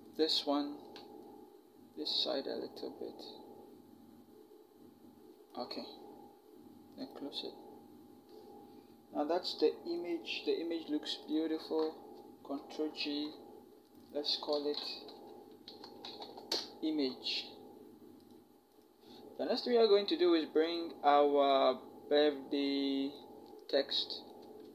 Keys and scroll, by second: 12.4 ctrl+shift+g, 14.9-16.3 typing.